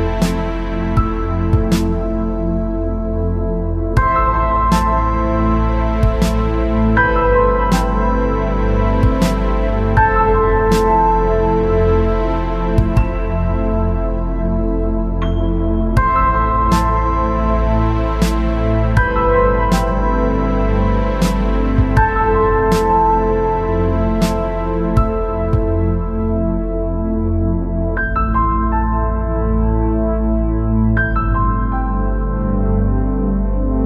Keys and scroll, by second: 19.8 ctrl+z.